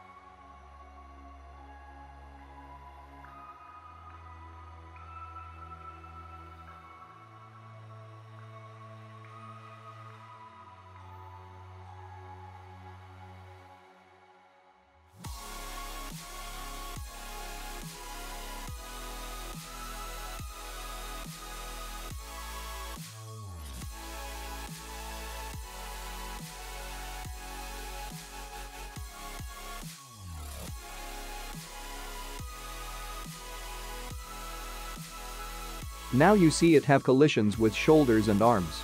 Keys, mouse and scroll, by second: 0.1 click, 3.8 click, 4.5 ctrl+Tab, 4.5 click, 5.4 click, 5.6 space, 8.3 click, 10.1 space, 11.4 click, 11.8 click, 12.2-13.3 scroll down 6, 14.8 click, 15.2 click, 16.4 click, 17.3 middle click, 19.2 click, 20.3 click, 21.1 click, 21.8 click, 22.2 click, 22.8 click, 23.3 click, 23.7 click, 24.2 click, 24.6 click, 24.9-25.3 scroll down 3, 25.3 shift+middle click, 27.8 click, 29.1-30.6 scroll down 5, 33.3 click, 35.7 click, 36.2 space.